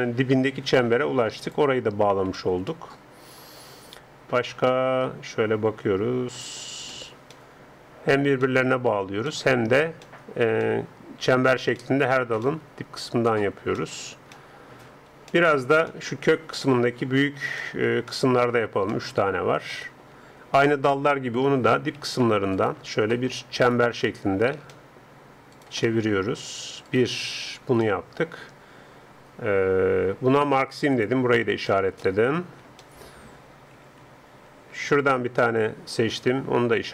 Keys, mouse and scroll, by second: 1.4-3.3 drag, 2.4-4.3 middle drag, 6.9-21.4 middle drag, 21.4 a, 21.6 a, 22.0 a, 22.3 middle click, 22.4 alt+scroll, 22.6-24.0 right drag, 24.0 click, 24.0 middle click, 24.4-28.7 alt+right drag, 28.7 middle click, 31.0-32.8 drag, 33.8 a, 34.2 a, 34.5 a, 35.0-36.9 alt+right drag.